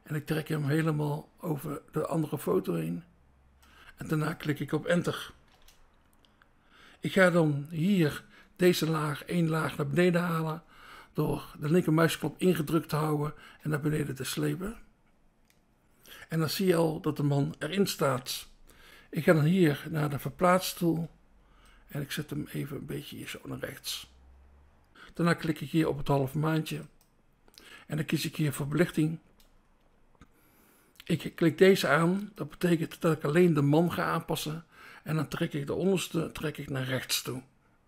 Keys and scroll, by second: 5.4 Return, 8.4 BackSpace, 19.4 BackSpace, 24.9 BackSpace, 29.3 BackSpace, 33.1 BackSpace, 36.2 BackSpace, 36.8 BackSpace.